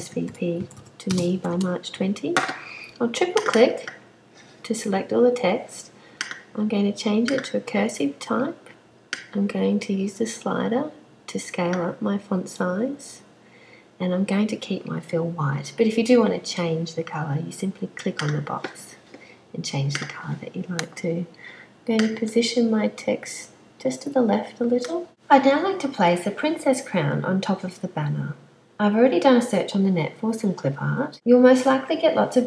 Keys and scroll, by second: 0.0-1.4 typing.